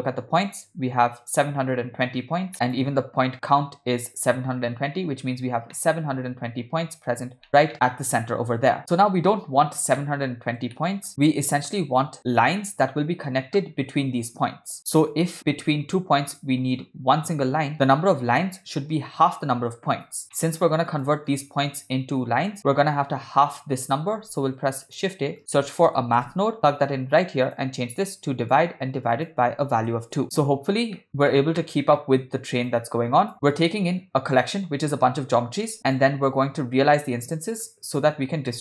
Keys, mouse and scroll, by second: 2.5 click, 2.5 middle click, 5.7 middle click, 7.5 shift+middle drag, 8.8-9.6 ctrl+middle drag, 10.0-10.5 middle drag, 10.8 shift+middle drag, 15.2 click, 15.7 click, 16.3 click, 17.7-20.2 drag, 20.3 middle click, 20.9 click, 21.3-22.6 drag, 22.7 middle click, 24.4 shift+a, 27.5-28.6 drag, 29.2 click, 30.3 ctrl+middle click, 31.0 middle click, 31.1 click, 31.3-31.8 ctrl+middle drag, 32.0 middle click, 32.7 click, 33.5 click, 35.8-36.1 drag, 36.5-37.7 drag, 38.5 middle click.